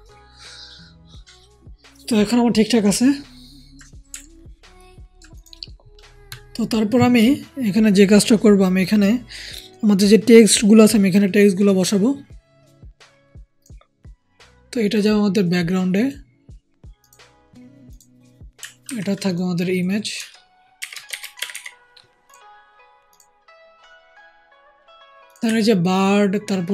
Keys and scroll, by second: 18.8 ctrl+g, 20.7-21.4 typing.